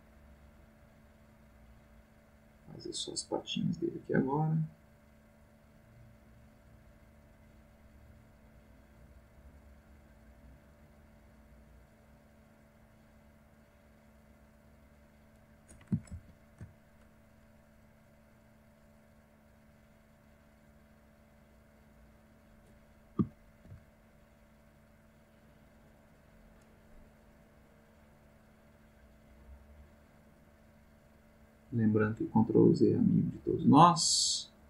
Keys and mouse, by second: 13.5-15.0 drag, 16.1 ctrl+z, 18.6-22.7 drag, 23.5 ctrl+z, 24.1-26.2 ctrl+drag, 27.9-34.6 drag.